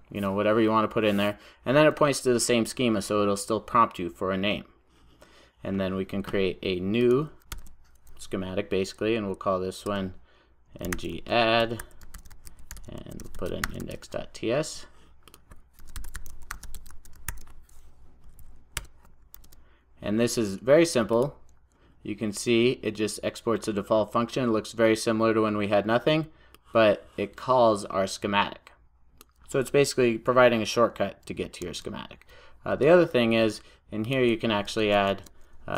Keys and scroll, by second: 7.6 super+n, 17.4 super+j, 18.8 Return, 19.4 super+s, 31.7 super+e.